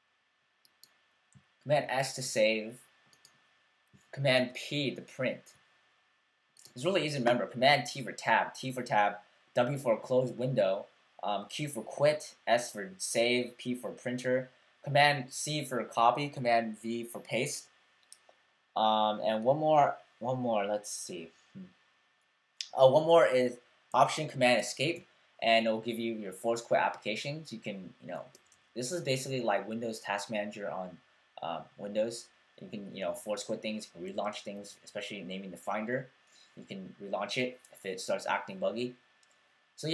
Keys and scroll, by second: 1.7 super+w, 4.4 super+p, 28.3 fn+Up, 28.9 Up, 32.5 fn+Down, 33.2 Down, 33.3 Down, 34.0 Up, 34.2 Up, 34.5 Down, 34.7 Down, 34.8 Down.